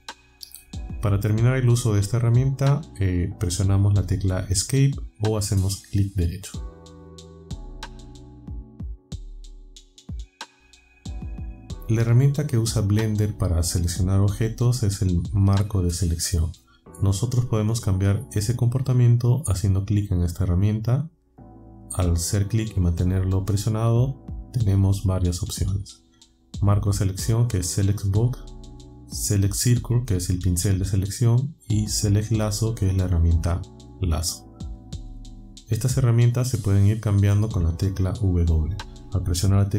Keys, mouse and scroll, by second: 7.8 Escape, 21.4 click, 24.1-35.3 drag.